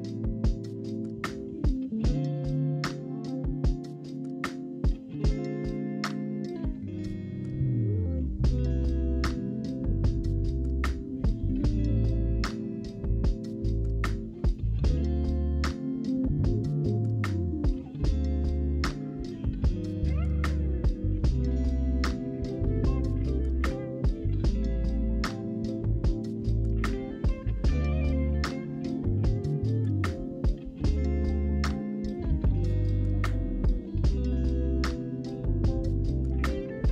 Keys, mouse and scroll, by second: 0.7-1.7 middle drag, 1.7 g, 2.5 z, 2.5 z, 2.8-4.7 middle drag, 4.7 i, 8.6-11.0 e, 11.7 Tab, 12.0-15.4 middle drag, 15.4 click, 16.4-19.5 drag, 20.4-21.5 drag, 21.5-22.4 scroll up 1, 22.4 Tab, 23.1 ctrl+r, 31.6 ctrl+r, 35.5 ctrl+b.